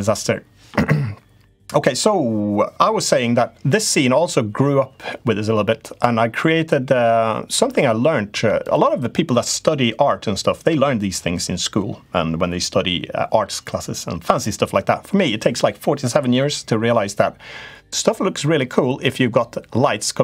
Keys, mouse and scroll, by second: 0.0-20.2 right drag.